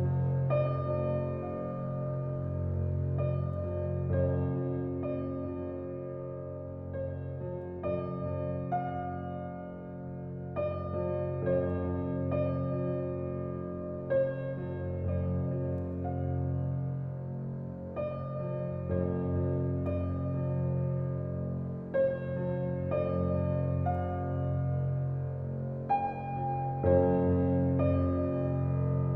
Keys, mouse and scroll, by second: 0.0 click, 0.7 g, 8.5-9.6 drag, 9.6-12.6 scroll down 1, 12.6-13.8 drag, 16.2-16.8 middle drag, 16.8-17.2 scroll down 2, 17.2-17.5 middle drag, 17.5-18.2 scroll down 2, 18.2 middle click, 18.9-20.3 drag, 23.9 click, 27.1 scroll up 4, 28.4-29.1 drag.